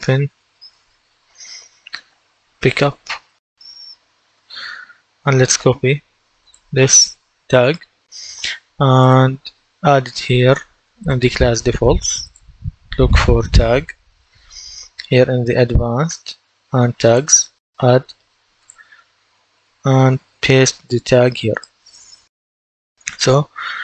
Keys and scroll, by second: 0.0-3.7 typing, 4.3 Return, 13.0-14.1 typing.